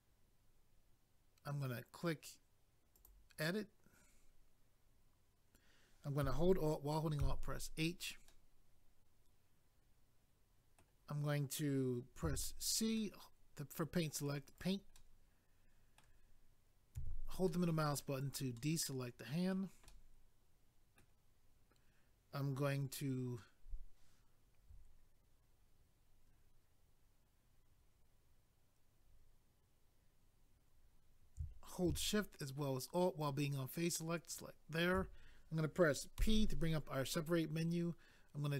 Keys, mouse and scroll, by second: 2.9 click, 3.0 click, 7.2 alt+h, 8.3 middle click, 12.2 c, 13.0 middle click, 14.6 right click, 14.7 right click, 15.0 middle click, 16.9 c, 17.5 middle click, 18.2 right click, 18.3 right click, 18.6 middle click, 19.9 middle click, 34.2 alt+click, 36.7 p.